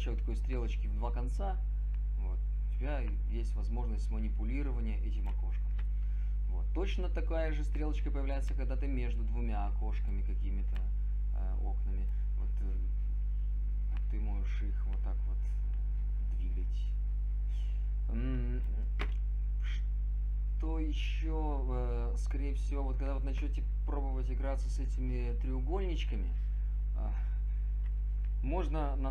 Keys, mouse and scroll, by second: 1.8 click.